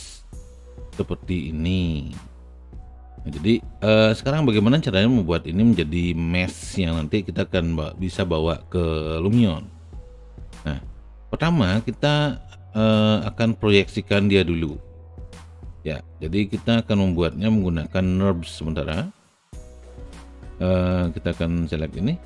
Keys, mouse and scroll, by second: 5.3 click, 9.8 space, 10.0-13.6 drag, 13.8 alt+right click, 14.3-15.7 alt+middle drag, 15.7 alt+right click, 16.2 alt+middle click, 17.3-18.8 alt+drag, 18.8 alt+middle click.